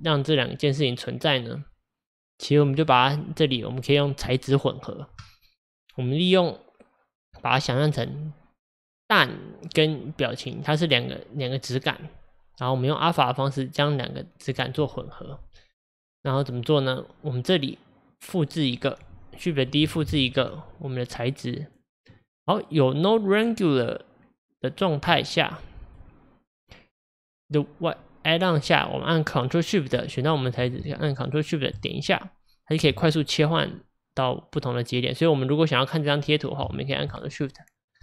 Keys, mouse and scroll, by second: 1.7-2.5 drag, 6.2-19.8 drag, 19.8 shift+d, 29.9-31.8 drag, 37.2 ctrl+shift+click.